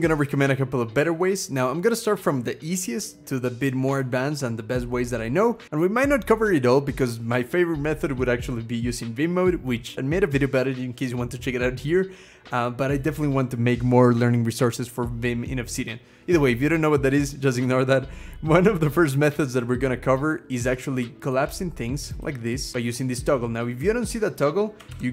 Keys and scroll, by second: 1.1-2.2 scroll up 1, 2.2-3.3 scroll up 1.